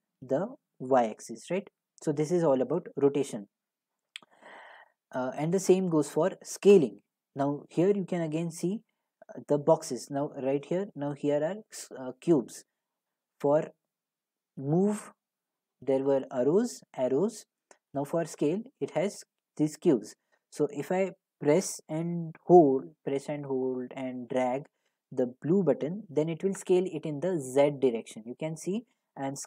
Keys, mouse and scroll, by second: 3.7 click, 6.8 click, 14.8 click, 18.0 click.